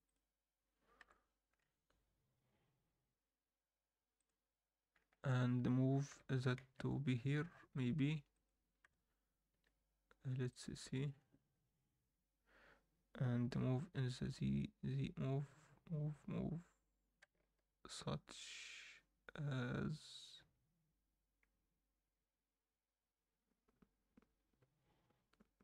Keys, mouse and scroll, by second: 1.0 KP_1, 1.5 scroll up 1, 4.0-4.4 scroll up 1, 4.4 click, 4.9 scroll up 1, 6.1 g, 8.8 KP_0, 9.5 z, 11.4 click, 13.5 g.